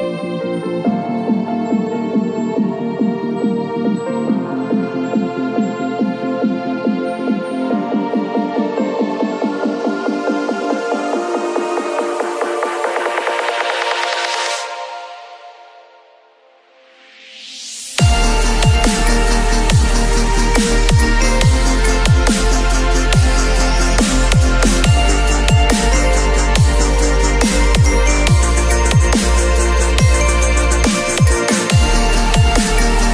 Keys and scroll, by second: 2.8 ctrl+v, 3.5 ctrl+t, 7.7 alt+shift+m, 8.4 ctrl+t, 24.1 space, 27.0 b, 28.3 ].